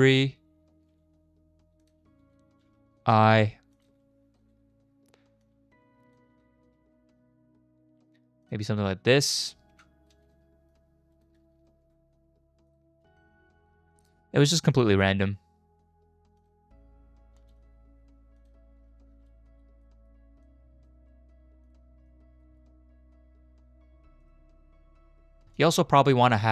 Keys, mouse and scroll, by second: 0.7 shift+`, 3.0 i, 3.7 click, 3.9 space, 4.4 space, 5.4 click, 6.7 shift+`, 9.7 i, 10.1 space, 10.3 space, 10.7 click, 11.6 shift+`, 13.9 i, 14.7 click, 14.9 space, 16.4 click, 17.4 space, 18.4 click, 19.9 middle click, 20.4-20.9 drag, 21.0 g, 22.1-22.4 drag, 24.0 space, 24.2 click, 25.5-26.5 drag.